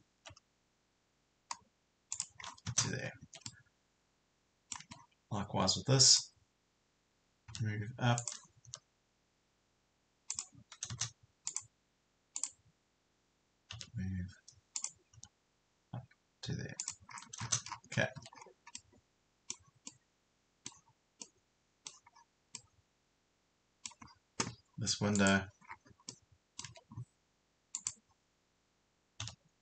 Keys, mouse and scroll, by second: 2.1 click, 2.5-2.9 scroll down 2, 3.3 Escape, 3.5-4.8 middle drag, 4.8 Escape, 5.0 scroll up 1, 6.1 click, 7.5 m, 8.2 click, 10.3 click, 13.7 m, 15.1 click, 16.8 click, 17.2 scroll down 1, 18.2 Escape, 18.4-18.7 scroll up 1, 18.7 middle click, 22.6-24.1 middle drag, 24.1-24.7 scroll up 1, 25.2 click, 25.7 scroll down 1, 26.1 middle click, 26.7 Escape, 27.7 click, 29.3 m.